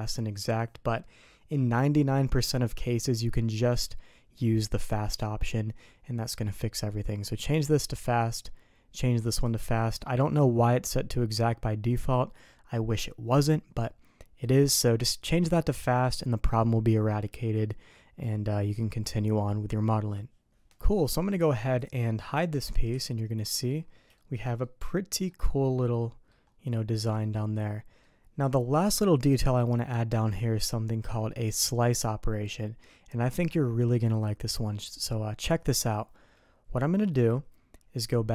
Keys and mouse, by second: 4.8 click, 9.3 click, 17.7 middle click, 19.5 middle drag, 21.8 click, 22.5 middle click, 22.9 h, 23.5 middle click, 24.2 shift+middle click, 24.6 middle click, 25.7 click, 27.1 click.